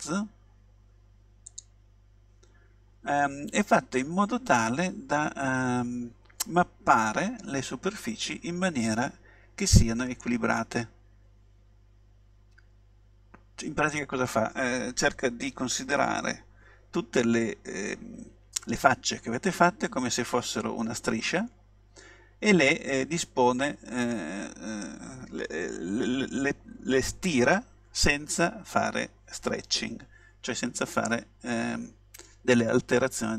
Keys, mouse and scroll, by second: 10.2-12.0 middle drag, 30.9-32.6 middle drag.